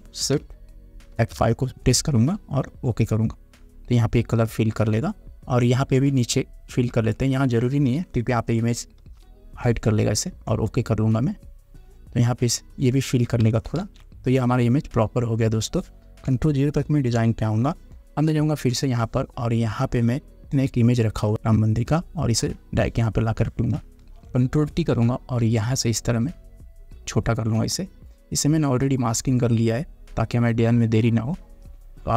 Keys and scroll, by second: 1.3 shift+F5, 9.2 shift+F5, 14.0 ctrl+d, 17.0 ctrl+0, 24.2 ctrl+t.